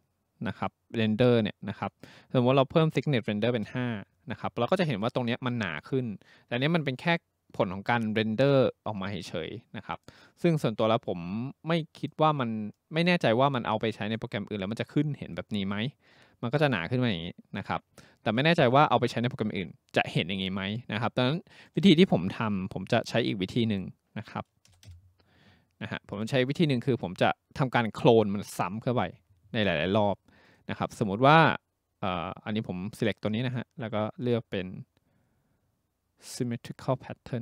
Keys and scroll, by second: 3.4 5, 3.7 Return, 18.2 ctrl+z, 24.7 0, 24.9 Return.